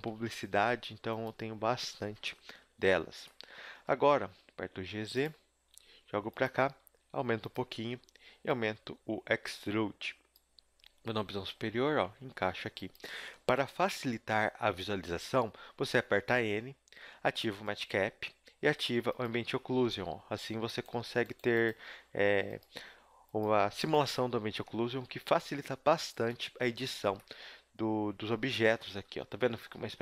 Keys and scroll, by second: 0.5 s, 1.7 KP_7, 2.7 z, 3.0 z, 4.0 g, 5.6 g, 6.8 s, 11.1 KP_7, 11.9 z, 12.1 g, 13.1 z, 16.1 n, 17.5 n, 19.8 a, 21.0 g, 21.8 g, 22.8 s, 23.4 g, 24.7 g, 29.0-30.0 typing.